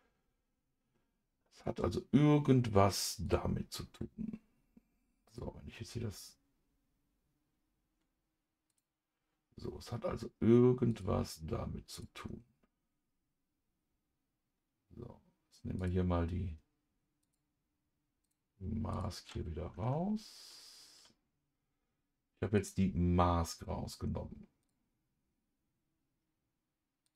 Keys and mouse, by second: 5.3 click, 8.7 click, 10.9 click, 11.9 click, 15.8 click, 17.2 click, 18.3 click, 18.9 click, 22.6 click, 24.6 click.